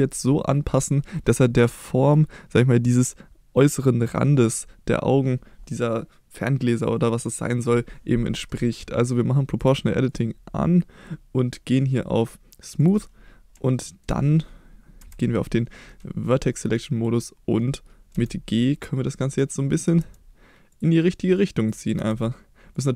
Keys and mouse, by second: 9.6 click, 10.0-13.2 drag, 13.6 shift+middle click, 15.0 1, 16.8-18.0 drag, 18.1 g, 19.3 click, 19.7 click, 20.0 g, 20.7 click, 21.6 click, 21.9 g, 22.7 click.